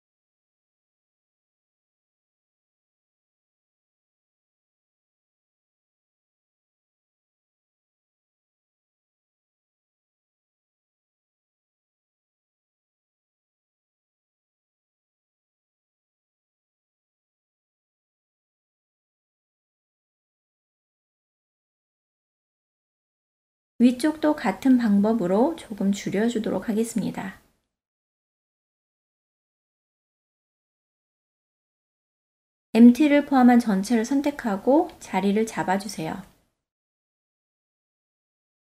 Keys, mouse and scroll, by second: 0.2-2.3 middle drag, 2.5 alt+z, 3.1-4.2 ctrl+middle drag, 5.0 Tab, 5.7-6.2 ctrl+middle drag, 6.6-10.9 middle drag, 11.2 shift+middle drag, 11.6-12.7 middle drag, 13.2 KP_1, 14.5 alt+z, 15.2 Tab, 17.2-19.5 drag, 20.1-23.0 middle drag, 23.5 KP_3, 24.7 click, 25.1-27.0 drag, 27.6 Tab, 28.0 click, 28.4-28.9 ctrl+middle drag, 29.1-30.2 middle drag, 30.3 alt+z, 30.6-31.0 ctrl+middle drag, 31.2 shift+middle click, 32.6-33.0 drag, 33.7 KP_1, 36.1-36.5 shift+middle drag, 37.2-38.7 drag.